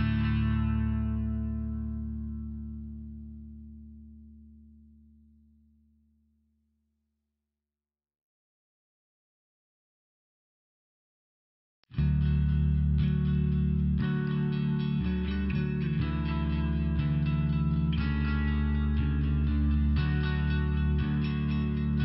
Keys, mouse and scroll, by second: 0.6 click, 1.3 click, 2.3 click, 4.7 click, 5.3 click, 6.6 click, 7.7 click, 10.0 click, 11.4 click, 16.9 click, 17.8 click, 20.7 click.